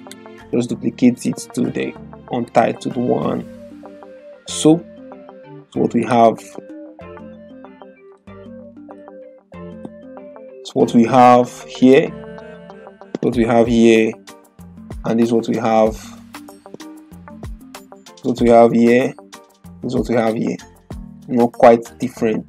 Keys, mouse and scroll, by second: 0.0 right click, 1.1 click, 8.3 typing, 14.3 typing, 17.0 click.